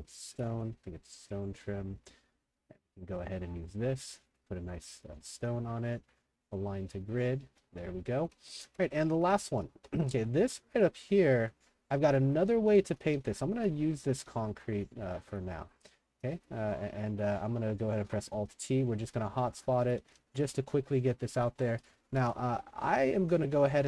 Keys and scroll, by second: 0.0-1.0 typing, 5.0 w, 5.4 shift+t, 7.2-16.1 typing, 18.0 alt+t, 18.8-23.8 typing.